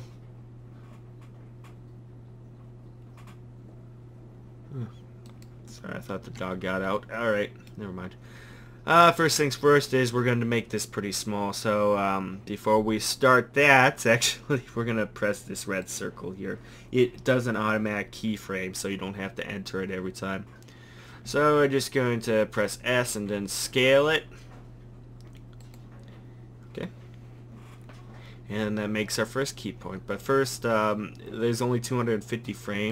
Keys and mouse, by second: 5.3-10.1 drag, 15.8-21.3 drag, 21.3 s.